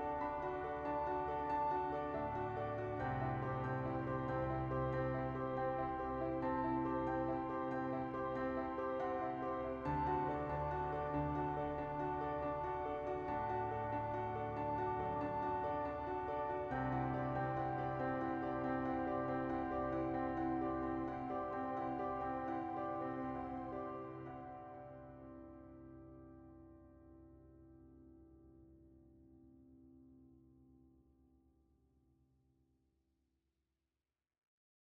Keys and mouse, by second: 1.1 shift+middle click, 1.6 shift+middle click, 2.3 shift+middle click, 3.0 click, 3.2 Tab, 3.6 KP_1, 4.7 click, 5.3 2, 5.7 click, 6.3 click, 7.3 alt+shift+click, 7.8 click, 8.6 shift+middle click, 10.8 u, 12.1 ctrl+KP_1, 13.3 /, 14.8 ctrl+click, 15.7 u, 16.7 ctrl+z, 17.3 click, 17.8 shift+click, 18.6 click, 19.2 ctrl+shift+click, 19.7 u, 20.4 3, 20.6 middle click, 21.1 l, 21.6 u, 23.1 Tab, 23.2 middle click, 23.8 KP_1, 24.3 Tab, 26.7 shift+d, 27.2 p, 27.7 Tab, 27.8 click, 28.1-29.2 right drag, 29.7 s, 31.7 Tab, 32.0 Tab, 33.1 Tab.